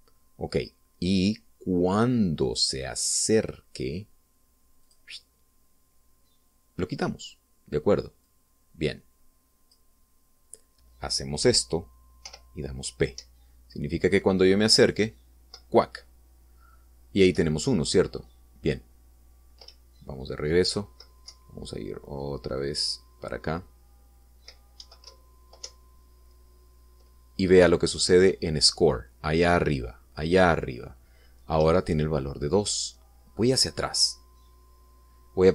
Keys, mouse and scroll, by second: 5.7 click, 9.1-10.7 drag, 13.0 p, 13.9 Up, 18.1 Left, 20.5 Up, 22.1 Right, 25.9 Left, 26.5 Up, 32.4 Down.